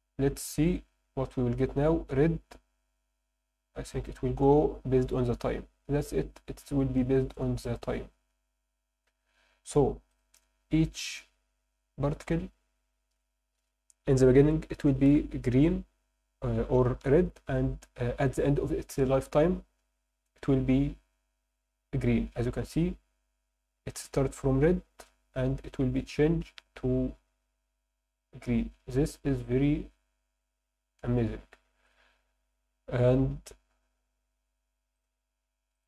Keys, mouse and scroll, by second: 0.7 click, 10.1 click, 22.7 drag, 31.8 click, 34.9 click.